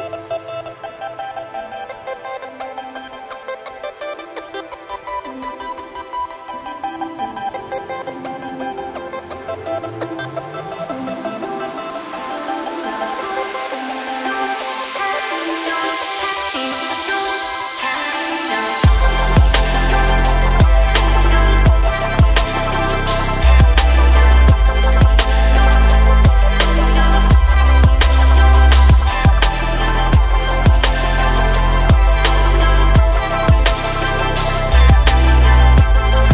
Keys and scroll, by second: 20.4 Delete, 26.6 Delete, 29.7 Delete.